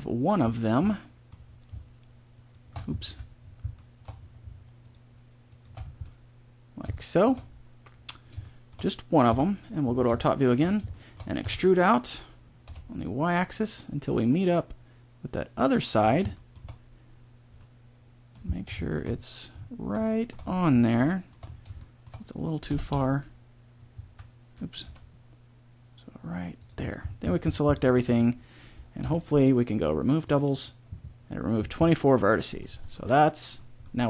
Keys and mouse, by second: 0.8 middle click, 2.3 click, 3.0 ctrl+z, 5.7 click, 9.3 KP_7, 11.4 e, 16.1 middle click, 20.1 middle click, 22.6 g, 27.8 a, 28.1 a, 29.0 w, 32.7 Tab, 33.5 middle click.